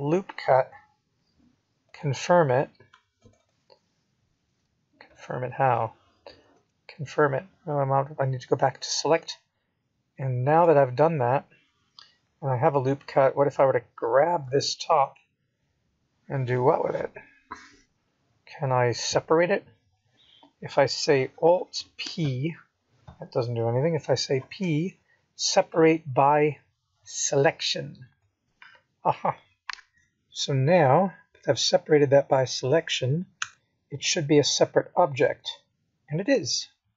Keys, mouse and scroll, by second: 4.3 middle click, 6.6-7.3 scroll up 4, 9.3 g, 15.4 middle click, 20.6 click, 21.9 click, 22.1 click, 25.2 Escape, 27.5 click, 29.2 click, 30.9 b.